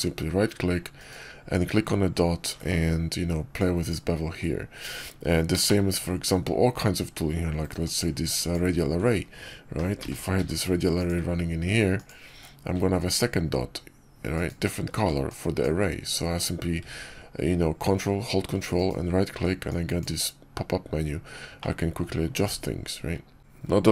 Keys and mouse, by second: 2.5-4.0 right drag, 5.5 shift+click, 7.7 click, 9.9 g, 11.8 ctrl+click, 14.2-16.2 ctrl+drag, 18.6-20.3 ctrl+drag, 21.6-21.9 middle drag.